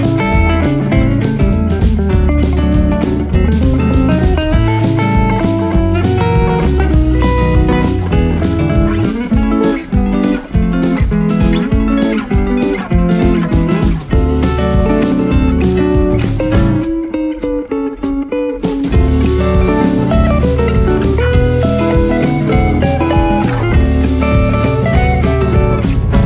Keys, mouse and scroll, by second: 1.7 click, 3.0 r, 3.6 r, 9.0 click, 9.5 r, 9.7 click, 9.9 r, 16.6 click, 17.1 r, 17.9 click, 18.5-19.2 scroll down 1, 19.2 scroll down 1, 19.2 r, 19.7 r, 21.6 click.